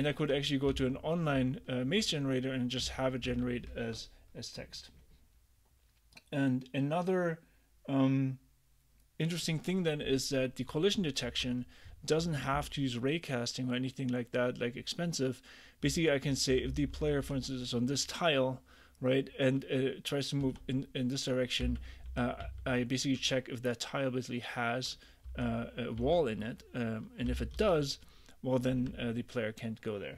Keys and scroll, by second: 0.8 k, 2.9 ctrl+d, 10.7 j, 11.4 j, 11.9 h, 15.9 h, 16.8 h, 17.3 h, 20.5-23.0 typing, 25.3 h, 26.0 l, 27.6 j.